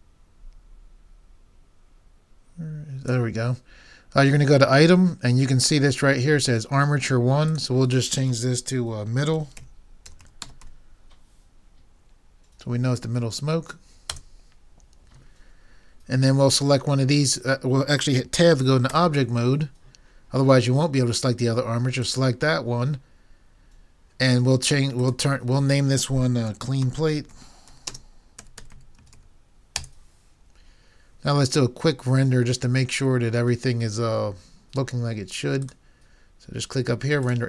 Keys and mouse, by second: 10.4 d, 18.9 Tab.